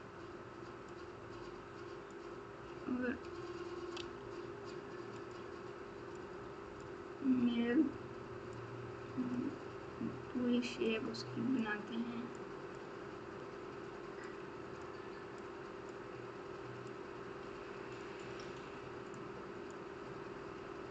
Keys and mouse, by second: 2.1-3.2 drag, 3.9 f, 6.1 click, 8.5 click, 10.8 click, 12.3 click, 14.2 click, 15.4 click, 16.9-18.0 drag, 19.1 click.